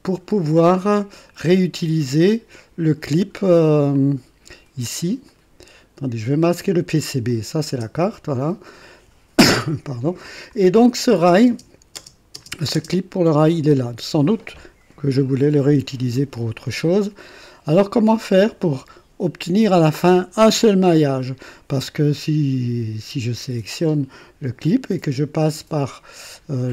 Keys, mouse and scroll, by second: 2.5 click, 3.9-4.9 drag, 5.3 click, 7.2 click, 7.7 space, 8.3-9.0 drag, 10.5 click, 11.5 space, 11.9 space, 12.3 space, 12.7 space, 16.7-17.7 drag, 23.8 click.